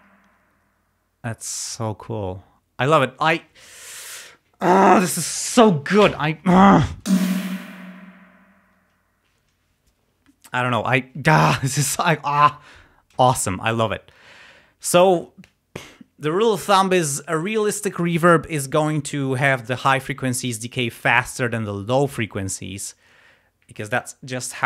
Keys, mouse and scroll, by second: 7.1 space, 8.3 space.